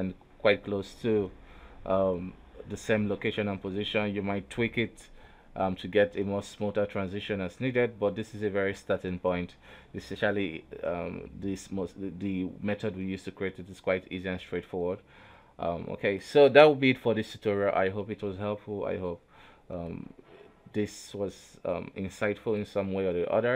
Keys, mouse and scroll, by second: 0.2-1.8 drag, 1.8 shift+space, 2.4 alt+a, 2.9 scroll down 1, 4.0-9.2 middle drag, 9.2 alt+`, 9.8 a, 10.2 KP_3, 10.8 shift+space, 11.0-12.1 drag, 12.1 Up, 12.7 Down, 13.4 Up, 13.7-14.2 middle drag, 14.2 Up, 14.6 Down, 15.0 Down, 15.4 Up, 15.8 Up, 16.2 Down, 16.4 Down, 16.7 Down, 17.1 middle click, 17.7-18.2 scroll up 2, 18.3 alt+a, 19.6 middle click, 19.7 KP_1, 20.2-20.5 scroll down 3, 20.5 KP_3.